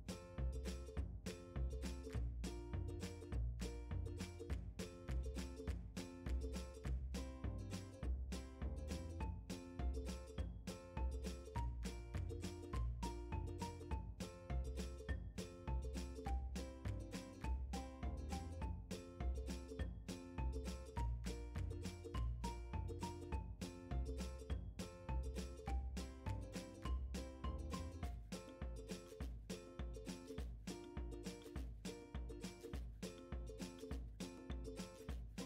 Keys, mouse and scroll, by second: 1.9 h, 3.1 ctrl+z, 3.7 g, 6.4 click, 6.8 g, 9.5 click, 11.5 click, 12.3-18.0 drag, 14.2 Return, 20.2 scroll up 1, 20.7 g, 27.2 click, 27.8 scroll down 2, 28.7 shift+middle click, 29.1 scroll up 1, 29.3-33.5 middle drag, 30.5 scroll up 2, 30.9 g, 33.5 click, 33.9-34.6 scroll down 1, 34.6 shift+middle click, 35.2-35.4 scroll up 1.